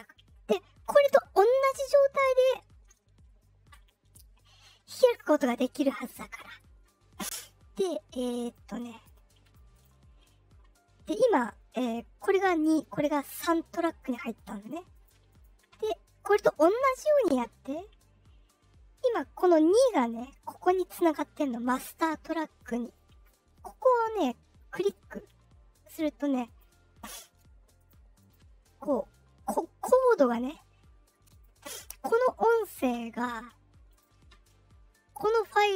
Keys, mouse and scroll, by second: 7.7 click, 8.4 click, 9.0 click, 9.4 click, 9.7 click, 13.9 click, 14.3 click, 14.6 click, 14.9 click, 15.2 click, 19.0 click, 24.7 click, 25.7 click, 26.4 click, 27.0 click, 27.7 click, 28.1 click, 31.2 click, 32.4 click, 33.8 click.